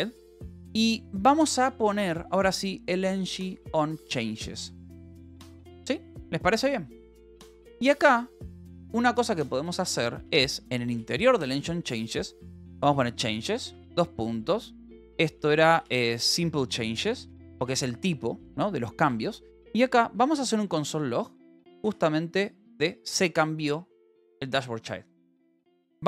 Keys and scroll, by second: 0.0-3.2 typing, 5.4 ctrl+s, 7.2 a, 7.5 space, 8.9 Escape, 9.1-10.9 typing, 12.3-13.8 typing, 15.1-16.8 typing, 17.2 Return, 18.1 ctrl+s, 18.5-20.7 typing, 22.0 ctrl+g, 22.3 s.